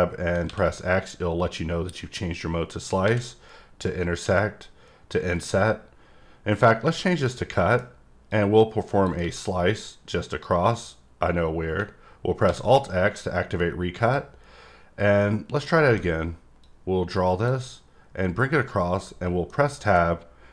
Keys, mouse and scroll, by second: 7.2 middle click, 8.3 click, 14.0 click, 15.2 middle click, 16.6 click, 19.5 middle click.